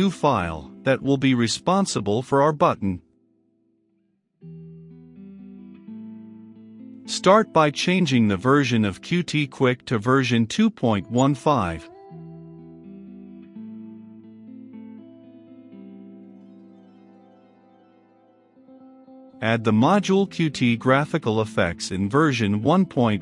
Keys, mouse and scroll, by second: 3.5-6.0 typing, 6.3 Return, 8.0-23.2 drag.